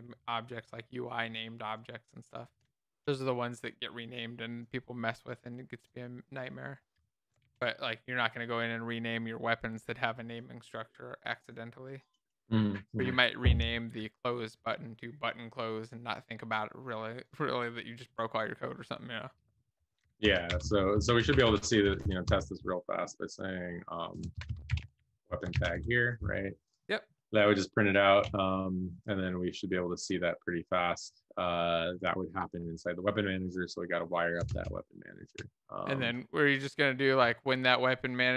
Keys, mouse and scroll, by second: 0.0-0.9 typing, 1.4 alt+Left, 7.8 ctrl+s, 18.2-19.6 typing, 19.9 Left, 20.2 Right, 20.7 Left, 20.7 BackSpace, 20.8 Left, 21.5 shift+', 21.9 Left, 22.0 Left, 22.2 Right, 24.1 Right, 24.4-25.4 typing, 25.6 ctrl+s, 25.7 Down.